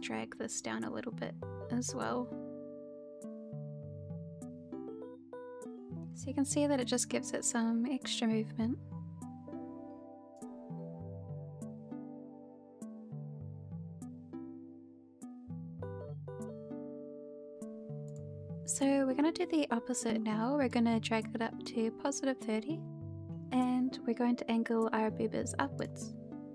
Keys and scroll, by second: 5.2 h, 5.6 h, 14.0-17.2 typing.